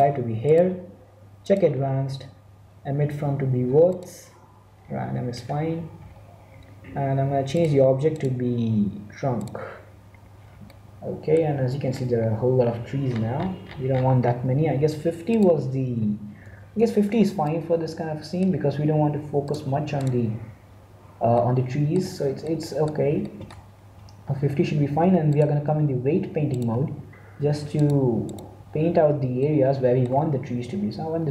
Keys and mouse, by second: 3.8-5.4 drag, 7.5-10.0 drag, 10.0 middle click, 11.4 middle click, 12.0-15.2 middle drag, 15.2-17.0 drag, 17.3-18.7 middle drag, 19.9-21.3 drag, 21.3-25.2 middle drag, 25.2-27.0 drag, 28.3-29.3 drag, 29.3-31.3 middle drag.